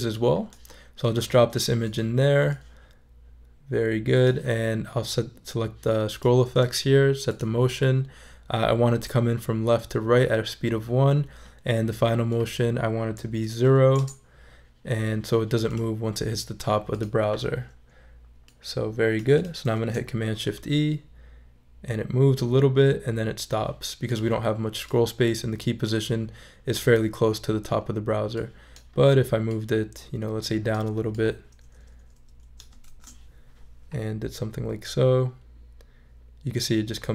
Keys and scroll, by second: 13.6 0, 14.0 Return, 19.7 shift+super+e, 32.8 shift+super+e.